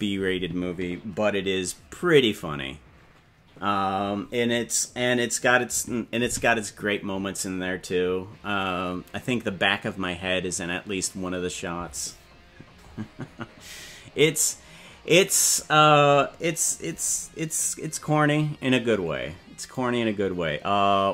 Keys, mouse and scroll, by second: 15.3 right click, 19.6 right click.